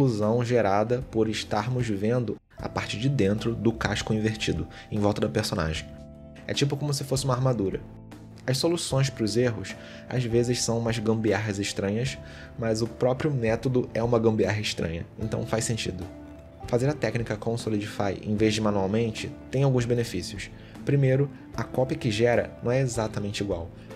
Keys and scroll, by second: 0.3 ctrl+z, 1.4 ctrl+z, 1.8 ctrl+z, 3.4 ctrl+z, 5.0 ctrl+z, 5.6 ctrl+z, 7.4 ctrl+z, 10.9 ctrl+z, 13.7 ctrl+z, 14.5 ctrl+z, 16.3 ctrl+z, 17.1 ctrl+z, 18.1 ctrl+z.